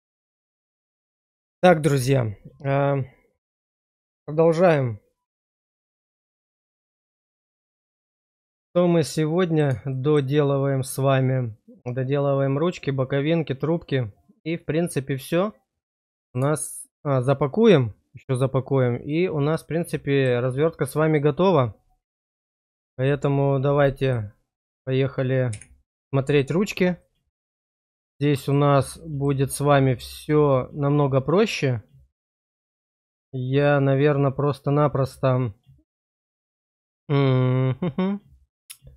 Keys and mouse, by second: 7.5-9.5 middle drag, 9.8 shift+middle click, 10.4-16.3 middle drag, 16.7 shift+middle click, 19.5 middle click, 24.0 click, 26.9-28.5 middle drag, 29.0 shift+middle click, 29.5-38.9 middle drag.